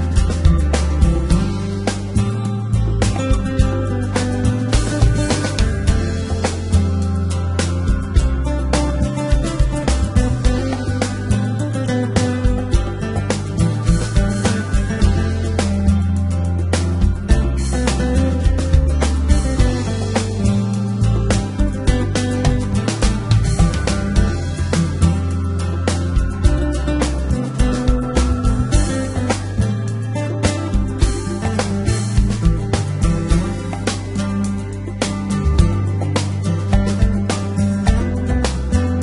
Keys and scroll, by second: 8.3 g, 8.8 x, 16.0 c, 20.0 Escape, 20.5 e, 20.9 z, 23.2 Tab, 30.7 space, 32.9 c, 33.7 i, 34.2 r, 35.6 Down, 37.7 BackSpace, 38.8 y.